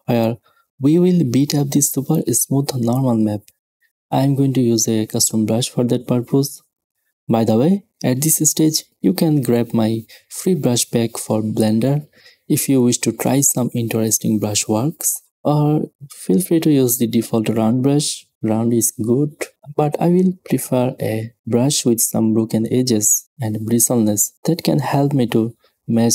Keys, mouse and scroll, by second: 15.2 middle click, 16.4 middle click, 20.2 middle click, 20.7 middle click, 22.0 middle click, 22.1-23.6 drag, 23.6 s, 23.7 middle click, 23.8-24.3 scroll up 1, 25.2 s.